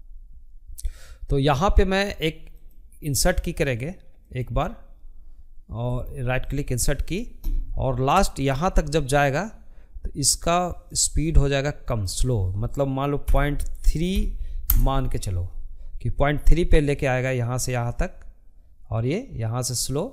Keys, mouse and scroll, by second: 4.6-6.3 right drag, 6.3-18.0 drag, 19.5 ctrl+z, 19.9 ctrl+z.